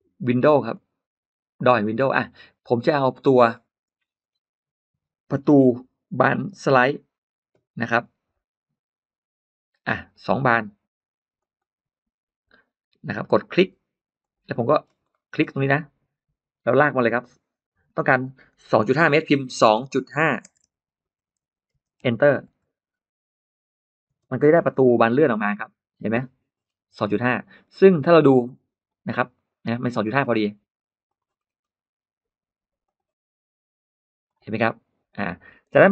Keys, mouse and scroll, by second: 0.6 click, 2.4-4.3 scroll down 5, 4.5-5.2 scroll up 1, 5.4-5.7 scroll down 1, 5.9-6.2 scroll down 1, 7.8-8.2 scroll down 1, 11.2 click, 14.0 click, 14.4 middle click, 14.6-15.2 scroll up 4, 15.0 middle click, 15.2 scroll down 2, 15.3 middle click, 16.5 click, 19.4-22.1 typing, 22.8 Return, 23.9 space, 24.0-24.5 scroll up 1, 24.1 middle click, 24.5 scroll down 1, 24.8-25.4 scroll up 4, 26.4-27.2 scroll down 4, 28.3 click, 29.2 click, 29.9 middle click, 30.9 click, 31.2 scroll up 1, 31.3 middle click, 32.7 click, 34.1 click, 34.9 click, 35.6 space.